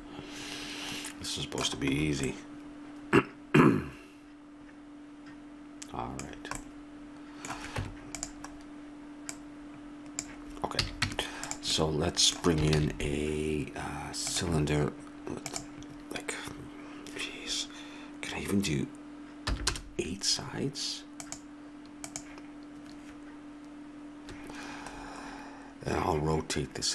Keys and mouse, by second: 4.0-6.3 middle drag, 7.7 Tab, 11.0 a, 11.1 Tab, 12.7 shift+a, 17.3-21.2 middle drag.